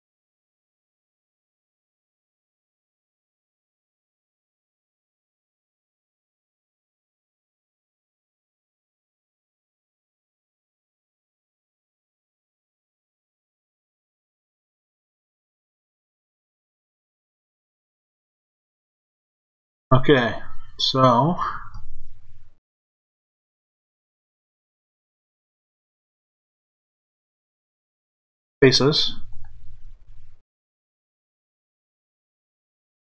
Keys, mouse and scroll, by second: 5.5 click, 8.8 shift+click, 9.6 shift+f, 12.2 click, 13.8 shift+click, 14.6 f, 16.8 click, 18.6 shift+click, 19.3 f, 20.9 click, 22.6 shift+click, 23.3 f, 25.4 click, 29.3 shift+click, 30.0 f, 32.7 click.